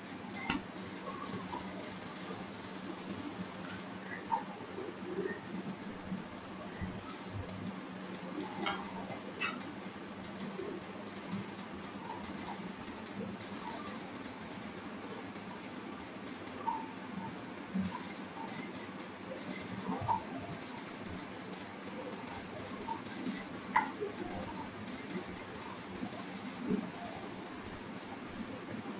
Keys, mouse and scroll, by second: 0.7 click, 2.3 click, 3.4 click, 4.5 click, 5.8 click, 6.7 click, 9.5 click, 11.0-11.4 scroll down 2, 11.5 middle click, 12.8-13.5 scroll up 1, 13.5 click, 14.8 click, 15.7 click, 18.3-18.7 scroll down 3, 18.6 middle click, 20.2 middle click, 20.2-21.0 scroll down 4, 20.7 middle click, 21.0 middle click, 21.1-21.7 scroll up 13, 21.7 middle click, 23.0 click, 24.7 scroll down 3, 24.9 middle click, 25.4 scroll down 3, 25.7 middle click, 26.6-27.3 scroll up 5, 27.3 click, 27.9 click.